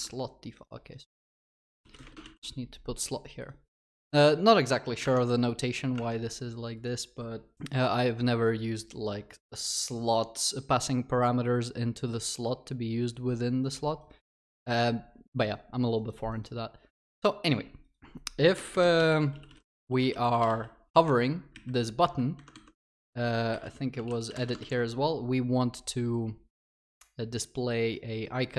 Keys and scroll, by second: 2.3 ctrl+s, 6.1 ctrl+s, 24.7 ctrl+s.